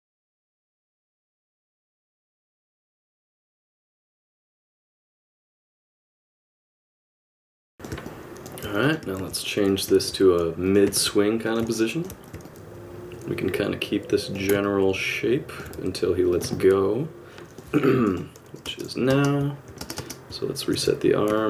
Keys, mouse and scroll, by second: 0.0-1.5 typing, 0.5 click, 0.6 middle click, 1.4 middle click, 1.8 middle click, 2.8 middle click, 2.8 click, 2.9 middle click, 3.0 r, 4.0 alt+i, 4.0 middle click, 4.7 click, 4.9-7.4 typing, 5.3 middle click, 6.4 ctrl+z, 6.5 click, 6.6 shift+click, 7.2 alt+a, 7.6 click, 8.0 middle click, 8.8 click, 9.2 alt+r, 9.6 click, 10.0 alt+r, 10.6 click, 10.9 alt+r, 11.4 click, 11.7 middle click, 12.4 middle click, 12.5 middle click, 12.5 i, 12.5 space, 14.6 middle click, 15.7 r, 16.5 middle click, 18.0 i, 18.6 space, 19.1 space, 20.7 alt+r, 21.4 middle click.